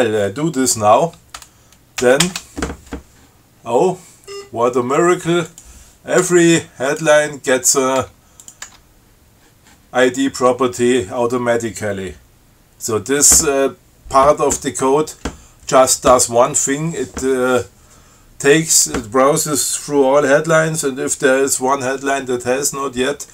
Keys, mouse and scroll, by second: 2.3 ctrl+x, 2.5 ctrl+s, 3.8 scroll up 2, 4.5 scroll up 2, 5.7 click, 6.5 Tab, 7.1 click, 7.4 Tab, 8.3 Tab, 8.6 click, 9.0 Tab.